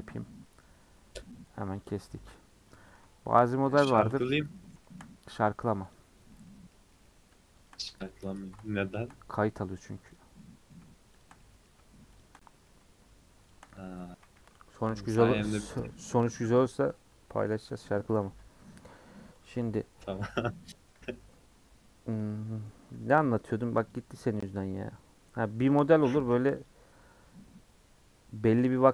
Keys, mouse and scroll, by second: 0.5-1.8 middle drag, 1.8 click, 2.3 click, 2.7-4.0 middle drag, 4.0 shift+click, 4.5 middle click, 5.1-5.9 scroll up 3, 5.9 click, 6.5-7.7 middle drag, 7.7 shift+click, 8.0-8.3 scroll down 4, 8.3 shift+middle click, 9.1-10.1 scroll up 4, 10.1 click, 10.4 middle click, 11.2 shift+click, 11.4 middle click, 12.2 shift+click, 12.4 middle click, 13.5 shift+click, 14.1 a, 15.1 u, 16.0 middle click, 16.3 /, 16.8 scroll down 3, 16.9 middle click, 17.5 /, 18.0 Tab, 18.2-19.0 scroll down 14, 18.3 h, 19.0-19.4 middle drag, 19.4 click, 20.2 KP_Decimal, 20.7-21.2 middle drag, 21.2 Tab, 21.3-22.8 middle drag, 22.8 3, 23.9 click, 25.0-26.2 middle drag, 26.2 alt+click, 26.6 alt+click, 27.2-28.9 middle drag.